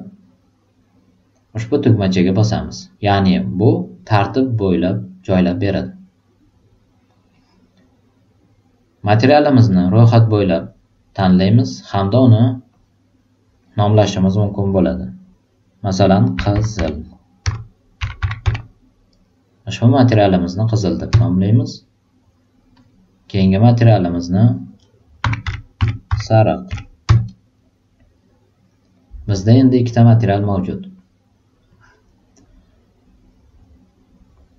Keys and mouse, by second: 2.0 click, 7.3 drag, 11.2 click, 12.6 click, 16.3-18.9 typing, 21.0 Return, 22.7 click, 24.0 click, 25.2-26.7 typing, 27.0 Return, 29.9-30.5 drag, 31.6-34.5 drag.